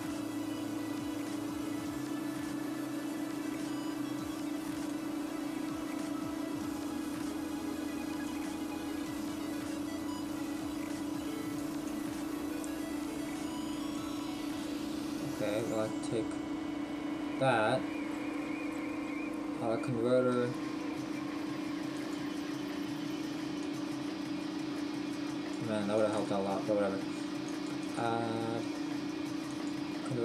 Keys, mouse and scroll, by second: 0.0 middle click, 1.5-1.9 scroll down 6, 2.5-4.4 scroll down 1, 5.0 click, 8.7 scroll up 2, 9.3 middle click, 9.3-10.2 scroll up 1, 11.7 click, 14.0 click, 23.7 click, 26.7 Delete, 26.7 click, 27.8 click.